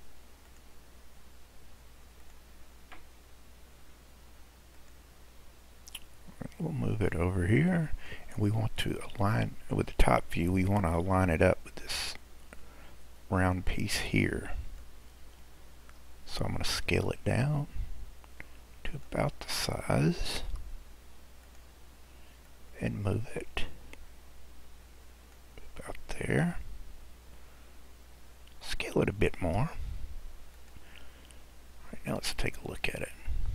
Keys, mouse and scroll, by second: 0.5-3.7 drag, 5.5-7.1 scroll down 2, 7.1 click, 9.2 click, 11.0 click, 15.3 scroll up 1, 16.8 s, 19.5-20.5 scroll up 7, 20.5 s, 22.5 click, 26.9-28.1 scroll down 3, 28.1-29.4 scroll up 3, 29.4 s, 31.1-32.2 scroll down 4, 32.2-33.5 middle drag.